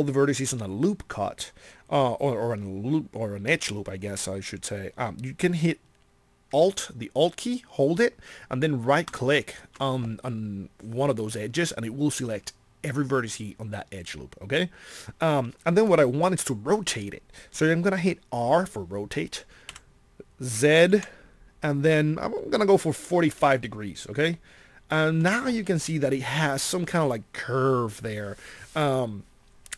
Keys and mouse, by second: 19.6 r.